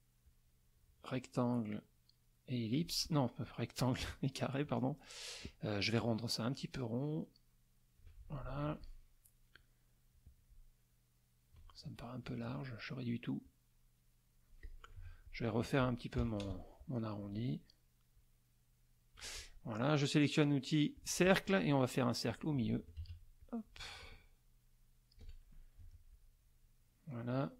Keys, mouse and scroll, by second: 0.2-3.0 drag, 3.9 click, 5.9-8.1 ctrl+shift+drag, 8.5 ctrl+shift+F1, 10.1-11.7 drag, 12.2 shift+click, 13.4-14.8 drag, 15.0 F2, 15.2 click, 16.2 KP_Subtract, 16.6 KP_Add, 18.1-19.3 ctrl+drag, 20.9 click, 22.3 click, 23.0 ctrl+shift+z, 23.4-25.4 ctrl+shift+drag, 26.1 F1, 26.1-27.5 drag.